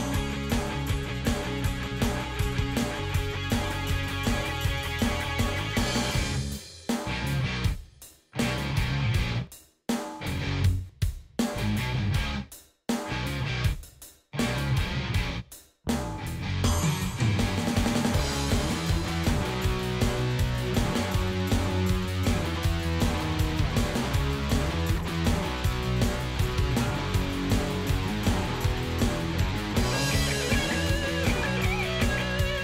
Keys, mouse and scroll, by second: 1.9-3.4 drag, 6.5 click, 7.2 click, 9.1 ctrl+g, 9.8 click, 11.3-12.5 drag, 12.9 click, 13.5 ctrl+s, 22.9 click, 27.5 click, 28.4-29.5 drag, 30.2 ctrl+shift+d, 32.5 click.